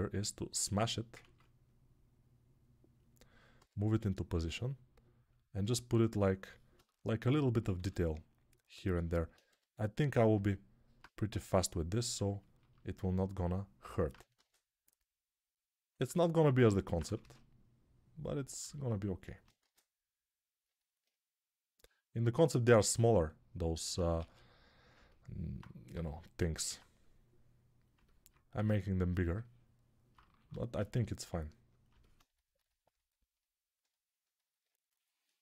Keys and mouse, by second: 1.2 ctrl+z, 3.4 g, 7.6 s, 9.3 g, 10.3 alt+right click, 10.5 alt+right click, 10.7 alt+right click, 11.2 g, 14.2 shift+d, 17.1 shift+d, 20.8-22.2 right drag, 24.0 shift+d, 24.8 alt+right click, 25.4-32.1 drag, 25.8 g, 27.8-29.2 alt+right drag, 28.4 g, 30.4 shift+d, 32.1-33.9 ctrl+alt+right drag.